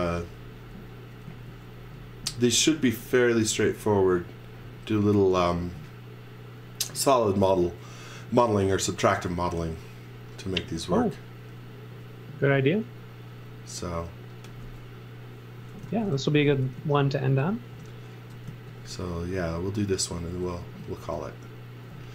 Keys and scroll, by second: 1.2 z, 15.8-18.4 typing, 20.1 x, 20.6 z.